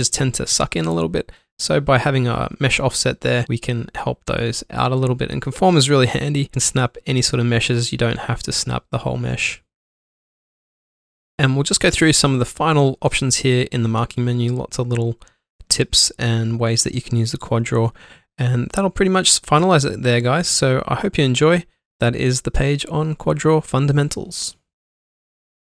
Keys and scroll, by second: 1.2 space, 3.1 typing, 3.5 ctrl+alt+1, 4.8-5.6 typing, 5.9 alt+shift+c, 6.8 alt+shift+c, 7.7 ctrl+q, 11.8 alt+Num_Lock, 15.8 Tab, 18.6 Tab, 20.4 ctrl+q.